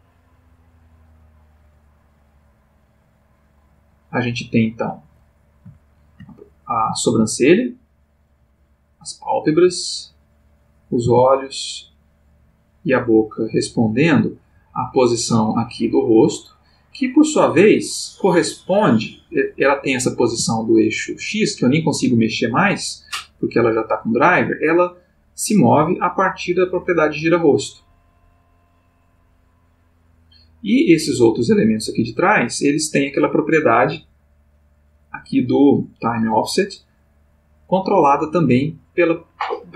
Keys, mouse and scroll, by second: 5.8-6.4 ctrl+middle drag, 6.7 click, 7.0 middle click, 7.2 g, 8.4 click, 8.9 click, 9.5 g, 10.4 click, 10.8 click, 11.0 g, 11.8 click, 13.0 g, 13.7 click, 14.4 click, 14.5 g, 15.3 click, 16.2 click, 18.6 click, 19.6 click, 20.3 g, 21.9 Escape, 24.7 click, 26.3-30.0 drag, 30.8 click, 32.2 click, 35.3 click.